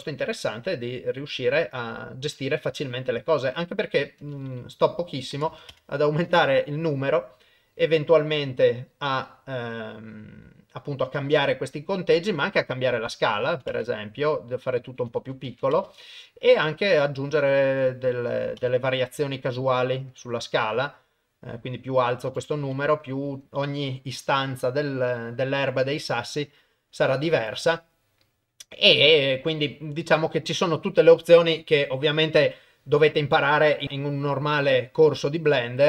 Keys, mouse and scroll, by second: 4.1-5.5 drag, 5.5 KP_0, 7.4 middle click, 8.1 middle click, 9.1 middle click, 10.3 middle click, 11.5 middle click, 12.5-14.0 drag, 14.7-15.8 drag, 16.7-18.7 drag, 18.7-19.7 middle drag, 20.1-22.7 drag, 23.9 click, 25.1 click, 26.0 click, 26.4 click, 27.4 click, 29.2 middle click, 30.4 middle click, 34.3 click, 35.2-35.8 drag.